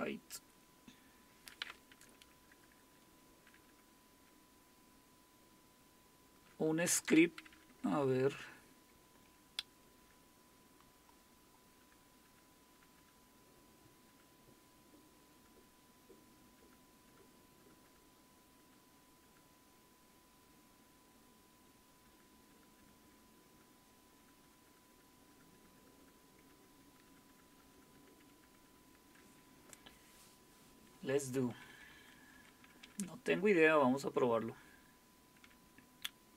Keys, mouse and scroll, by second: 4.8 Down, 4.8-6.2 Down, 6.9-10.0 Down, 7.8-8.5 typing, 10.0 Page_Down, 11.8 Page_Down, 12.2 Page_Down, 12.7 Page_Down, 14.1 Page_Down, 16.8-17.6 typing, 17.6 Page_Down, 22.0 Page_Down, 22.5 Page_Down, 22.8 Page_Down, 23.0 Page_Down, 24.4 Page_Down, 25.3 Page_Down, 25.5 Page_Down, 26.0 Page_Down, 26.2-27.3 Page_Down, 28.2 Page_Down, 31.2 Page_Up, 31.8 Page_Up, 32.8-35.6 Page_Up.